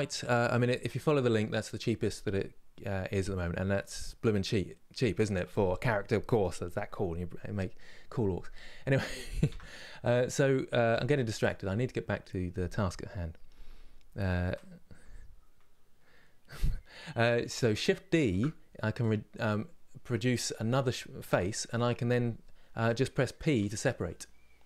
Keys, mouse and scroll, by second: 9.2 Tab, 10.6 3, 11.1 click, 18.0 shift+d.